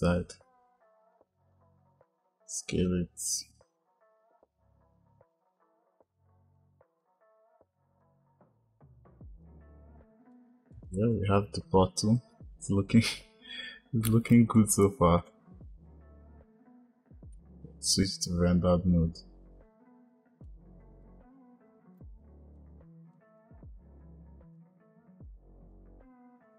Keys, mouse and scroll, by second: 4.1 s, 5.7 click, 6.5 click, 6.9 click, 7.1 click, 8.9 click, 9.8-11.7 drag, 15.4 click, 17.3 click, 20.7 shift+a, 21.1 s, 22.1 click, 22.5 click, 23.2 x, 23.7 x, 24.9 click, 25.4 s.